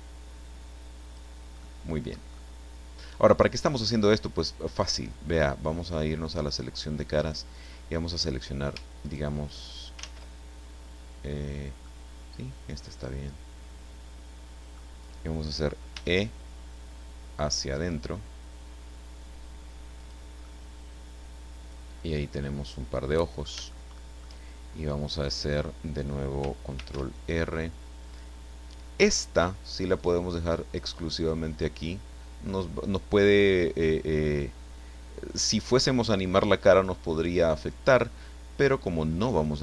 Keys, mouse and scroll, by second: 0.0-1.3 drag, 1.6 middle click, 2.3-4.2 middle drag, 6.1 click, 7.5 right click, 9.0 shift+right click, 10.0 ctrl+shift+z, 11.8-15.0 drag, 15.9 e, 20.0 click, 20.4-23.6 middle drag, 23.7 shift+middle click, 26.8 ctrl+r, 30.0 click, 31.2 click, 37.6 click, 39.2 right click.